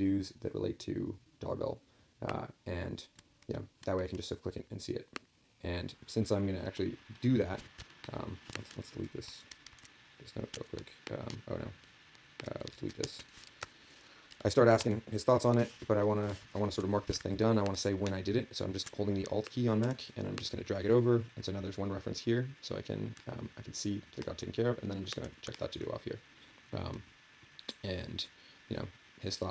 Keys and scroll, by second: 9.7 ctrl+a, 12.7 ctrl+a, 13.0 ctrl+k.